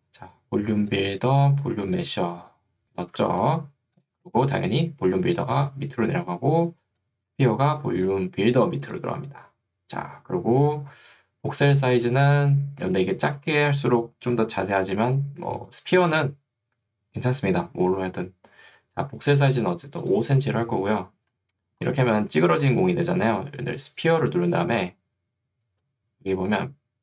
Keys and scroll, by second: 3.3 ctrl+2, 4.3 Escape, 19.5 5, 25.7 ctrl+2.